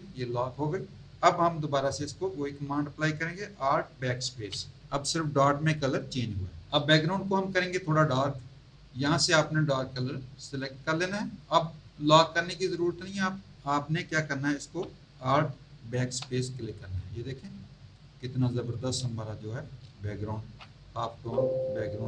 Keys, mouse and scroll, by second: 6.7 click, 10.6 click, 16.0 alt+BackSpace, 17.3 z, 17.9 alt+click, 18.4 alt+click, 19.0 space, 19.0 click, 20.2 z, 21.1 z, 21.5 click.